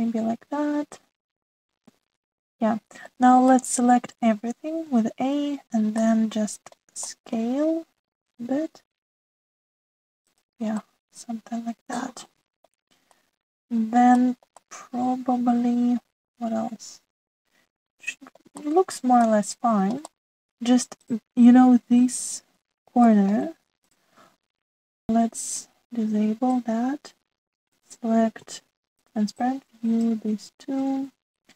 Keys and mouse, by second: 0.6-4.1 middle drag, 4.5 middle click, 5.8 a, 6.9 middle click, 8.0 shift+middle click, 9.3 s, 11.8-13.6 middle drag, 14.1 middle click, 15.2 shift+click, 15.6-19.5 middle drag, 19.7 shift+middle click, 20.2 middle click, 21.1 shift+middle click, 24.0 shift+middle click, 24.9 click, 26.4 click, 27.6-28.7 drag, 29.5 alt+z, 30.0 click, 30.3 middle click.